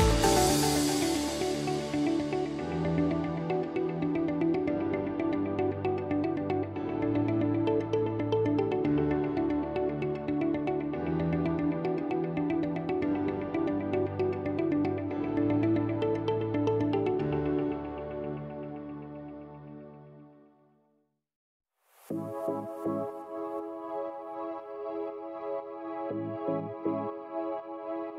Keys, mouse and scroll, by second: 1.4 click, 2.0 F1, 3.4 click, 4.0 click, 4.8 click, 6.4 click, 7.5 click, 9.1 F2, 10.2 click, 10.3 click, 10.9 click, 11.8 click, 11.8 click, 12.5 click, 13.3 click, 13.5 Delete, 14.6 click, 16.0 click, 16.7 click, 16.9 Delete, 17.8 click, 19.9 click, 20.5 F1, 22.5 ctrl+d, 25.3 h, 27.8 ctrl+click.